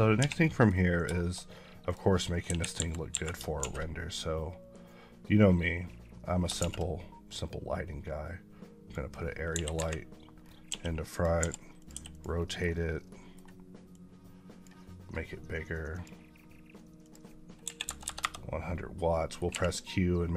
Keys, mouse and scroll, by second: 0.3 middle click, 0.7 scroll down 1, 1.0 shift+middle click, 1.7 click, 2.3 KP_1, 2.6 KP_5, 3.7 a, 4.6-6.3 drag, 6.5 shift+a, 9.4 KP_1, 10.3 scroll down 3, 10.5 g, 11.0 click, 11.2 r, 11.7 click, 11.8 g, 12.0 click, 12.2 middle click, 13.2-13.8 middle drag, 13.8-17.5 drag, 17.5 KP_1, 18.0 KP_Enter, 19.0 middle click, 19.4 q, 20.2 click.